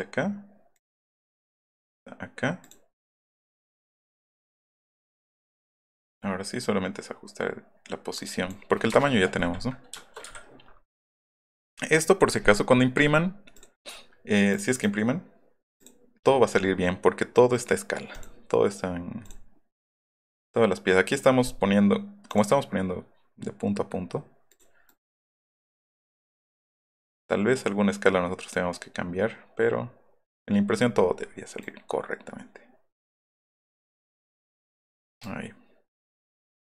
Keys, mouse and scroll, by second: 6.1 middle click, 8.8 Return, 9.3 middle click, 10.2 Escape, 10.9 click, 13.5 click, 14.5 click, 14.7 click, 15.8 click, 19.2 click, 22.2 click, 24.5 right click, 24.9 right click, 25.6 click, 25.8 click, 25.9 middle click, 26.4 middle click, 27.2 middle click, 28.5 middle click, 29.8 middle click, 30.8 scroll down 1, 34.9 middle click.